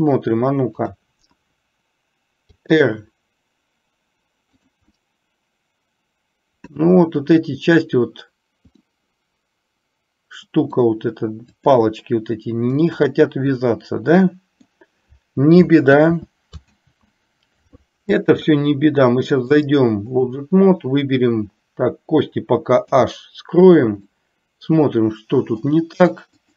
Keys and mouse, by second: 0.9 click, 2.7 r, 5.2-6.9 middle drag, 9.1-10.9 middle drag, 11.7 click, 12.9-14.9 middle drag, 16.1 ctrl+z, 19.7 click, 23.1 h, 24.2-25.8 middle drag.